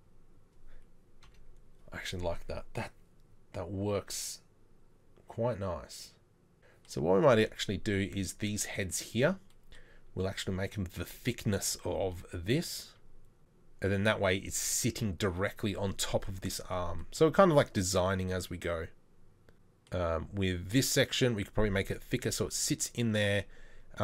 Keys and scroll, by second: 1.3 KP_3.